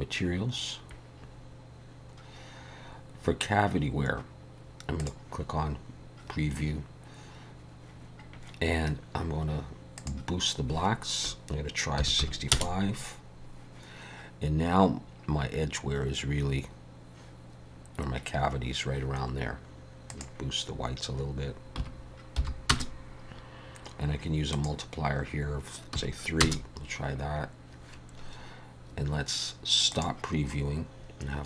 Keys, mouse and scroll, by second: 0.0 click, 2.2 scroll down 4, 2.7-3.2 scroll up 1, 3.2-3.5 scroll up 2, 5.4 click, 10.2 click, 20.1 click, 24.7 click, 30.1 click.